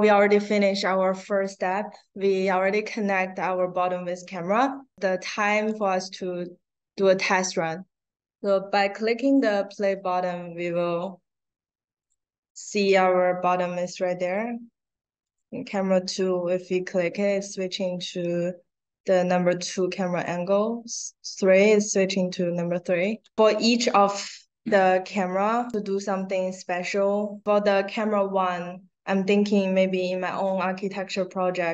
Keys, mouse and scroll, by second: 5.6 click, 11.9 click, 12.4 click, 14.2 click, 15.2 click, 20.0 click, 25.6 click.